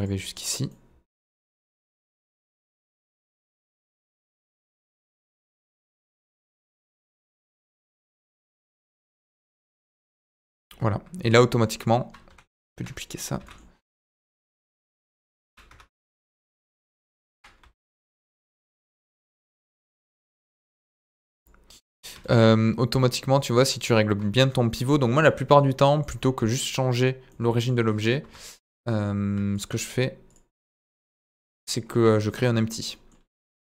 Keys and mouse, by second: 0.1 middle click, 0.6 middle click, 1.7 middle click, 2.6-4.0 middle drag, 4.4 g, 4.4 middle click, 5.7 click, 5.9 Tab, 6.6 g, 6.6 middle click, 9.3 click, 9.6-9.9 middle drag, 10.3-11.6 middle drag, 11.7 click, 12.2 KP_1, 13.3 shift+d, 13.4 middle click, 14.8 ctrl+click, 15.6 Tab, 15.8 middle click, 16.4 click, 17.3 KP_1, 17.6 z, 18.8 g, 20.4 middle click, 20.6 Tab, 20.8 z, 21.3 click, 21.7 middle drag, 22.9 middle drag, 23.6-23.9 middle drag, 25.3-26.0 middle drag, 27.2-27.6 middle drag, 28.2 KP_1, 30.3-31.1 drag, 31.3 click, 31.6 middle drag, 32.9 middle click, 33.4 shift+a.